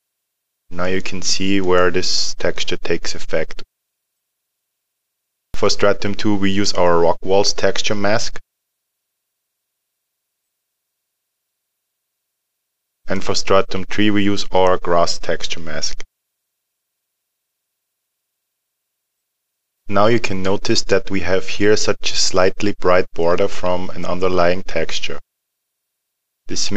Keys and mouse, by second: 8.6 click, 13.0 click, 17.3 click.